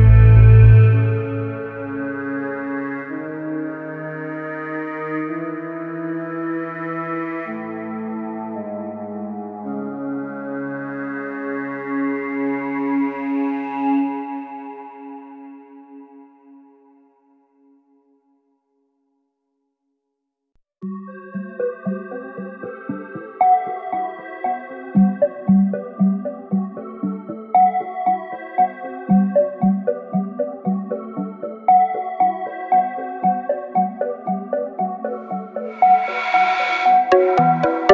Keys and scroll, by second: 0.0 ctrl+e, 3.3 alt+s, 6.7 ctrl+e, 8.2 ctrl+e, 9.6 alt+z, 11.2 alt+z, 15.3 ctrl+e, 17.2 ctrl+e, 19.9 ctrl+e, 21.9 ctrl+e, 23.6 ctrl+e, 25.5 ctrl+e, 32.0 Tab, 33.5 ctrl+e, 35.5 ctrl+e, 36.7 ctrl+e.